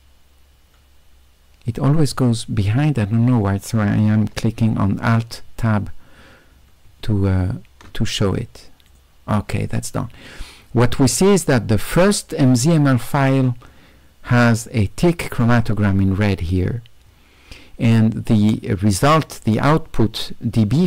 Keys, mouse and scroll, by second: 5.4 q, 6.9 q, 7.1 q, 7.4 q, 9.0 click, 14.6-15.4 right drag.